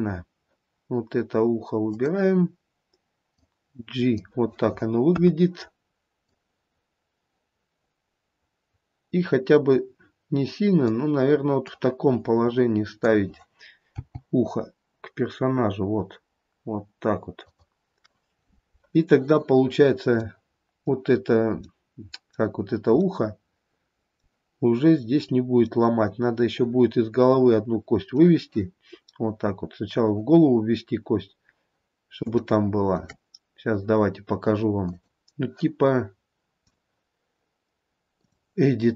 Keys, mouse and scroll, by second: 2.1 click, 3.6 click, 5.3 KP_1, 6.5 click, 11.8 click, 13.3 click, 14.1 g, 20.1-20.5 scroll up 1, 20.5 middle click, 21.3-22.1 scroll up 1, 22.1 middle click, 22.1 scroll up 1, 23.5 middle click, 26.0 middle click, 26.8 middle click, 27.2 middle click, 29.0-30.2 scroll up 2, 32.7 shift+middle click, 35.2 click, 36.9 click.